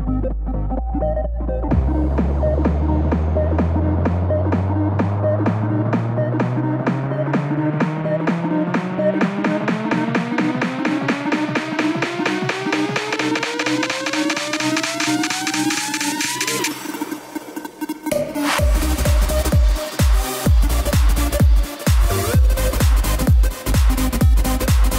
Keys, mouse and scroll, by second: 1.5-3.5 shift+middle drag, 3.5 click, 3.8-4.9 shift+middle drag, 4.9 shift+click, 5.6 KP_1, 6.0 KP_3, 9.0 alt+e, 11.0 ctrl+z, 13.1 alt+e, 15.5 click, 17.2-18.8 middle drag, 18.8-19.7 scroll up 1, 19.7 Tab, 20.0 click, 20.3-21.3 middle drag, 21.3 click, 21.7-24.9 middle drag.